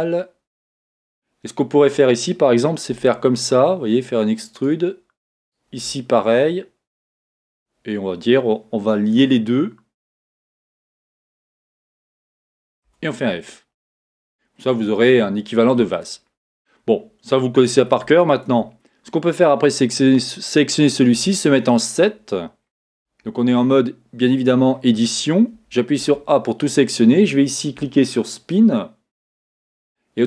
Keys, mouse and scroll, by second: 0.6-0.9 scroll down 1, 0.9-1.5 scroll up 1, 2.3 click, 2.9 e, 5.5 click, 5.7 e, 10.1 shift+click, 13.0 f, 13.3-13.8 scroll down 1, 14.3-15.5 scroll up 1, 15.5 scroll down 1, 18.7 Tab, 21.1 KP_7, 22.6 scroll up 1, 23.2 Tab, 25.5 a, 29.5-30.2 drag.